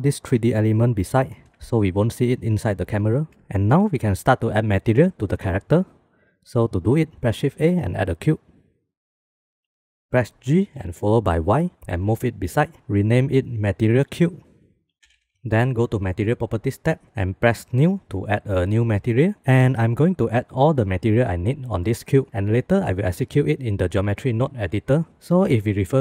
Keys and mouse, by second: 0.4 g, 3.0 shift+click, 3.5 ctrl+s, 7.8 shift+a, 10.4 g, 13.4-15.3 middle drag, 16.9 middle click, 17.7 click.